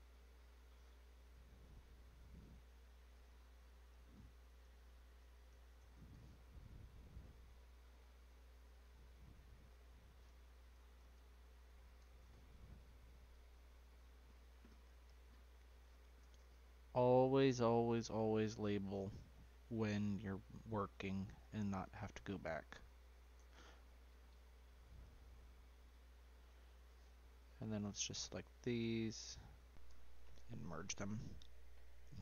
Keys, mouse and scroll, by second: 0.1-3.2 drag, 7.9 click, 8.5 click, 8.7-11.8 drag, 13.0 click, 13.3-15.8 drag, 15.8 s, 17.5 click, 18.5 click, 18.7-21.8 drag, 24.3 click, 24.8 click, 25.0-28.0 drag, 28.6 shift+click.